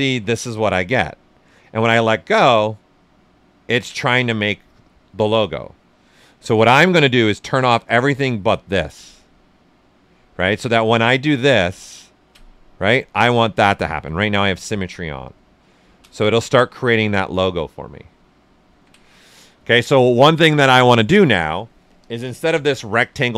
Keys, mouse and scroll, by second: 3.7 ctrl+z, 7.3 click, 10.6 click, 10.7 ctrl+click, 11.2 ctrl+space, 13.7 ctrl+z, 14.2 x, 15.2-18.5 ctrl+drag, 18.5 ctrl+z, 22.0 ctrl+click.